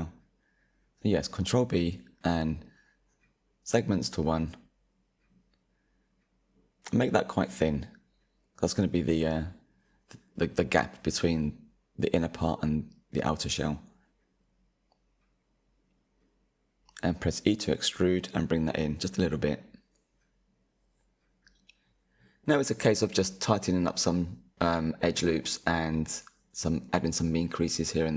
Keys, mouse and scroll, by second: 0.3 ctrl+b, 12.0-14.9 middle drag, 14.9 e, 24.2 click, 25.1 middle click, 25.8 click, 26.2-27.8 middle drag, 27.8 Tab.